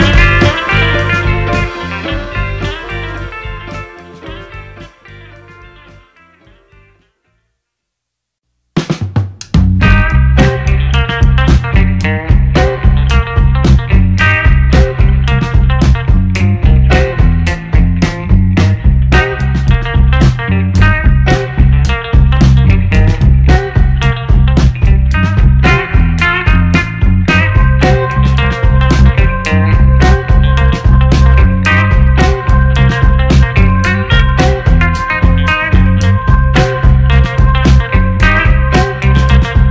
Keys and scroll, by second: 10.6 shift+a, 18.7 ctrl+alt+g, 22.8 4, 23.0 8, 23.3 Return, 27.8 2, 28.1 4, 28.3 Return, 34.5 5, 34.7 0, 34.9 Return.